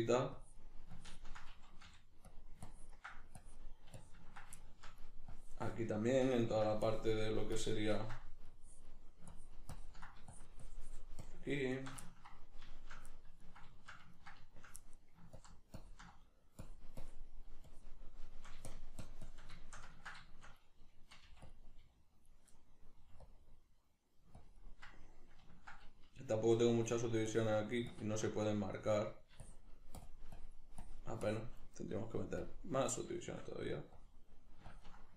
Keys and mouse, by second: 0.4-2.3 drag, 1.9 f, 2.7-4.6 ctrl+drag, 4.6 shift+middle click, 5.3-12.1 drag, 12.1-15.4 ctrl+middle drag, 15.4-18.3 ctrl+drag, 18.3 shift+middle click, 18.7 shift+click, 19.6-21.5 shift+middle drag, 21.3 f, 21.5 click, 21.8 middle click, 21.8 f, 22.3 click, 23.0 middle click, 23.0 f, 23.3 click, 24.4-25.5 ctrl+drag, 25.5-26.8 ctrl+middle drag, 26.8-33.2 drag, 33.2 shift+middle click, 34.0-35.1 drag.